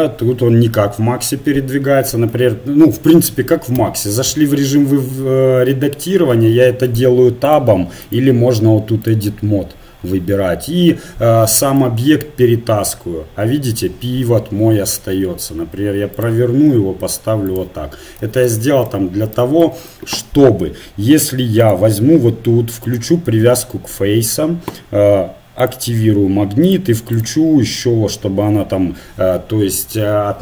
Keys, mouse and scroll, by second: 2.3 Tab, 3.8 a, 4.3 a, 7.6 click, 9.1 click, 11.8-13.8 drag, 15.0 r, 16.8 g, 18.2 Tab, 19.0-20.2 middle drag, 22.9 click, 25.6-27.5 middle drag, 27.5 right click, 28.0 middle click.